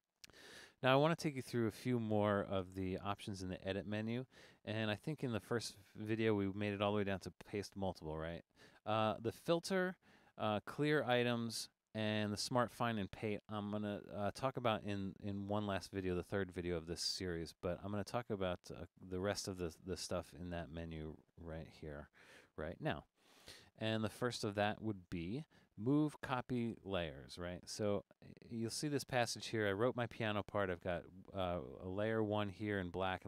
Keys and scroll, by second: 22.4 super+=.